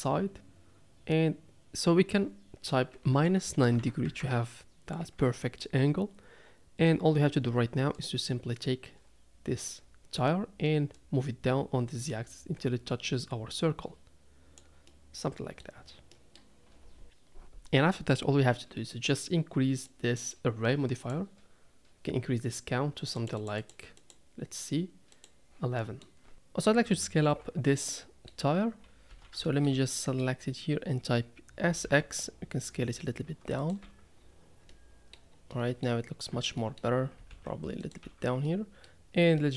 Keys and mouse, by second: 5.1 KP_3, 7.9 click, 10.9 click, 11.2-14.6 drag, 14.9-15.6 middle drag, 16.2 middle click, 20.0 click, 21.0 click, 23.2 click, 23.6 click, 25.1 click, 25.9 middle click, 26.3 Tab, 27.3 Tab, 27.8 middle click, 29.1 a, 29.5 shift+middle click, 30.0 middle click, 31.7 s, 33.8 Tab, 34.7-35.1 middle drag, 35.6 middle drag, 36.3 Tab, 36.6 middle click, 37.1 s, 38.0 Tab, 38.5-38.9 middle drag, 39.4 middle click.